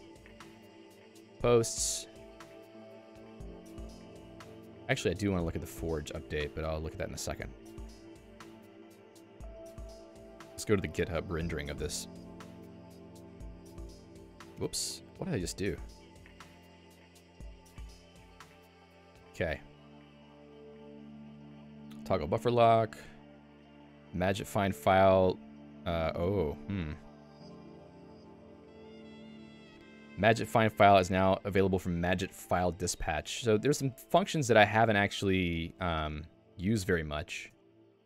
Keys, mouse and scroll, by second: 14.2 ctrl+d, 16.6 click, 17.1 q, 37.6 Return.